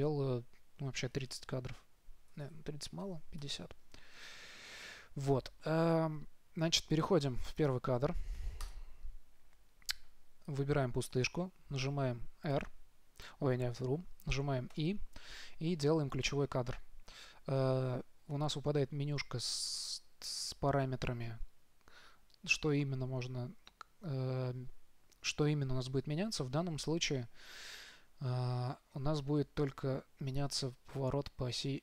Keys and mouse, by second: 12.8 r, 15.0 i.